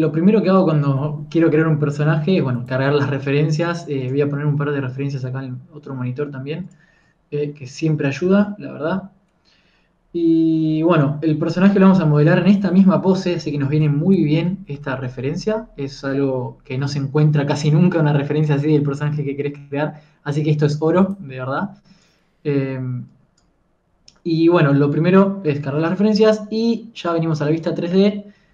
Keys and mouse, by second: 22.9-25.4 drag, 27.6 KP_1.